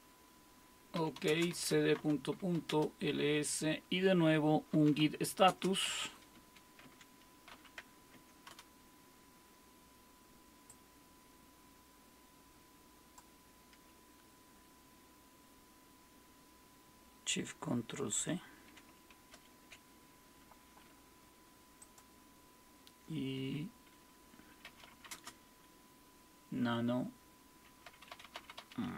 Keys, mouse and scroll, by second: 0.7-2.9 typing, 4.5-7.5 typing, 8.1 Tab, 8.5 Return, 10.7-19.3 drag, 19.3 ctrl+shift+c, 21.8-24.5 drag, 24.4-25.5 typing.